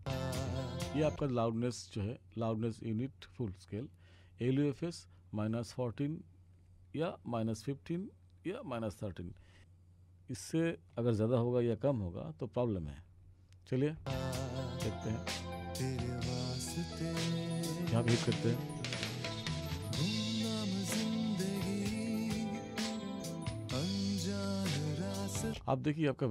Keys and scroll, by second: 0.0 space, 14.1 space, 25.5 space.